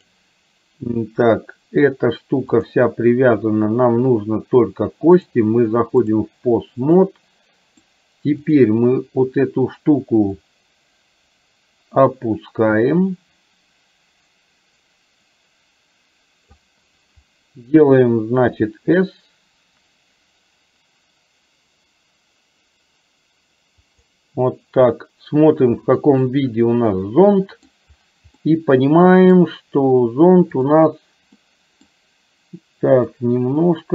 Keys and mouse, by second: 0.0 click, 5.1-6.1 drag, 7.0-8.0 middle drag, 8.5 click, 10.9-17.0 drag, 25.8 click, 26.3-27.8 middle drag, 28.5-29.5 middle drag, 30.6 click, 31.5 middle click, 33.6-33.9 drag.